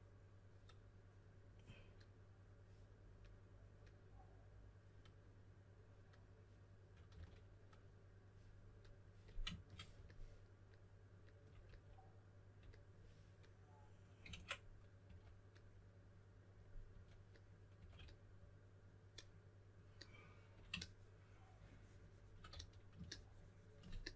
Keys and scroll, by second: 7.1 s, 14.3 super+z, 15.0 typing, 16.9-17.7 typing, 22.5 s.